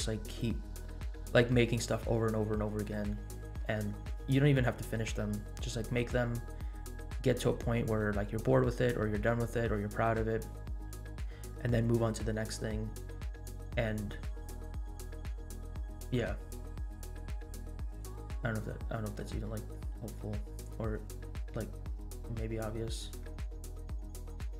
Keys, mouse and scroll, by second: 0.7 scroll up 2, 3.1-3.5 middle drag, 18.4 scroll up 1, 19.4-19.8 scroll down 2, 20.6 scroll up 2, 21.6 scroll up 1, 22.6-23.3 scroll down 4.